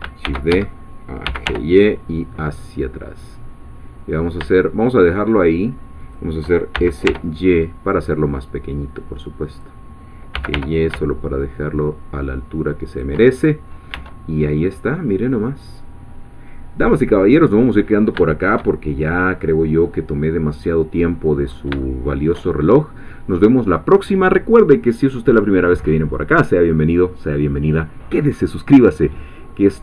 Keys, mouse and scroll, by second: 0.2-1.9 typing, 0.5 shift+Escape, 6.0 shift+click, 6.7 shift+s, 7.1 shift+y, 9.5 click, 10.1-11.0 typing, 12.9 shift+click, 13.3-13.6 shift+scroll down 1, 14.0 Tab, 14.3-14.6 scroll down 2, 17.1-18.2 middle drag, 18.8 shift+middle click, 19.4-19.9 scroll down 2, 19.9-21.4 middle drag, 21.4 scroll up 1, 21.9-23.4 shift+middle drag.